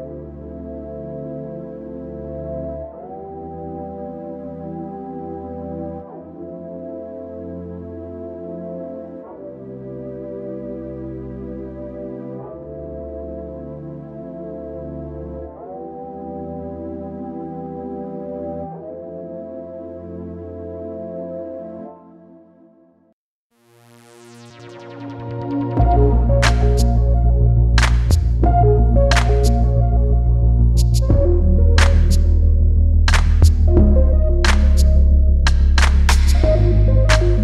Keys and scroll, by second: 7.3 space, 8.2 space, 9.5 Delete, 11.3 space, 12.0 space, 18.7 ctrl+c, 26.0 space, 35.9 space.